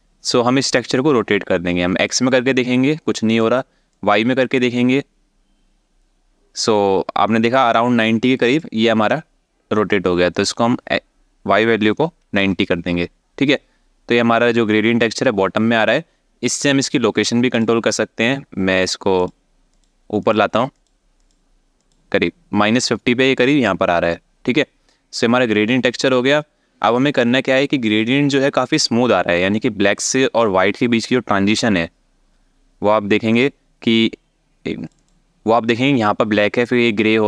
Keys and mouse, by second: 1.9-3.0 drag, 3.6-8.2 drag, 10.0-12.1 drag, 17.2 click, 19.5 click, 20.0 click, 20.4 click, 20.9 click, 33.0 click, 34.7 click.